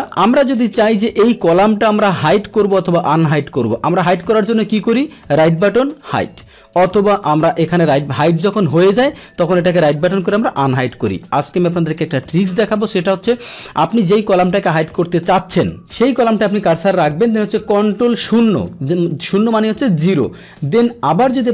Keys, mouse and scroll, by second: 0.0 click, 4.2-5.1 right drag, 5.5 click, 6.7 ctrl+z, 7.5 right click, 8.3 click, 8.4 right click, 8.9-9.2 drag, 9.4 right click, 10.8 click, 11.8 click, 15.9 click, 18.2 ctrl+d.